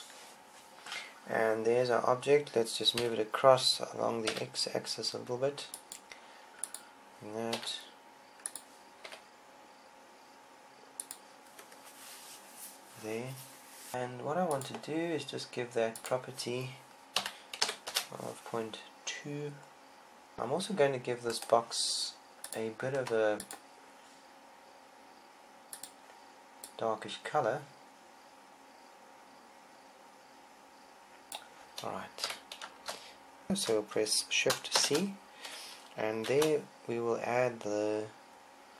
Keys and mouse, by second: 3.1 g, 6.0 click, 6.5 KP_0, 6.5 r, 7.8 click, 8.4 click, 8.4 s, 9.4 click, 9.9-11.0 drag, 9.9 g, 11.3 click, 12.0-13.9 drag, 22.1-23.7 right drag, 23.4-29.2 drag, 31.8 KP_1, 33.0 z, 35.6 shift+c, 37.3 shift+a.